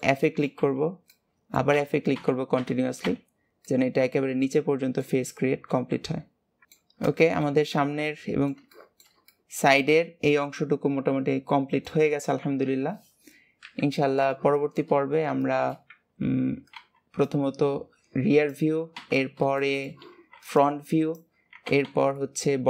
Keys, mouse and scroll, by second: 0.6 f, 1.0 middle click, 1.6 f, 3.5-5.6 middle drag, 5.6 KP_3, 6.6 middle click, 6.8-7.2 scroll down 3, 7.2-12.3 shift+middle drag, 12.3 KP_1, 14.4 shift+middle click, 14.8 scroll up 5, 15.4 shift+middle click, 15.8-16.2 scroll up 2, 16.2-17.3 scroll down 3, 19.5-22.6 shift+middle drag.